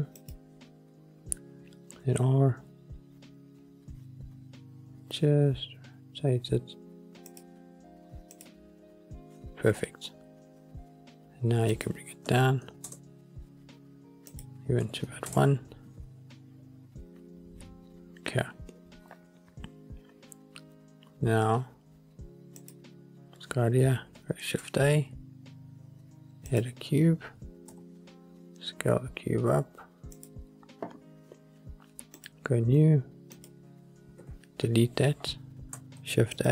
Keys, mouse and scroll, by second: 0.3 click, 2.2 r, 7.4 click, 8.5 click, 9.5-10.0 drag, 11.8-13.2 drag, 14.4-15.4 drag, 17.2 middle click, 17.2 scroll up 1, 18.3 scroll down 1, 19.0 scroll up 1, 22.8 click, 24.5 shift+a, 28.5 s, 30.3 click, 32.3 click, 33.5 click, 34.3 Delete, 34.7-35.9 scroll up 4, 36.2 shift+a.